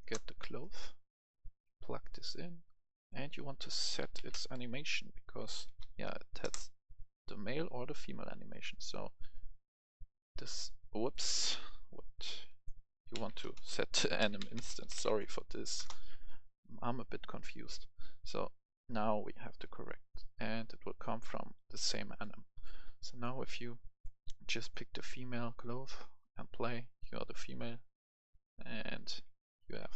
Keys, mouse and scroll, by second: 0.0 Return, 0.6 right click, 1.2-2.4 drag, 3.5 click, 3.8 s, 4.0 e, 4.1 t, 5.4 s, 5.6 k, 6.4 Return, 7.2-11.0 drag, 11.4 Delete, 11.9-13.4 drag, 12.9-15.0 typing, 15.7 Return, 16.9-29.2 drag, 29.2 w, 29.6 a, 29.9 s.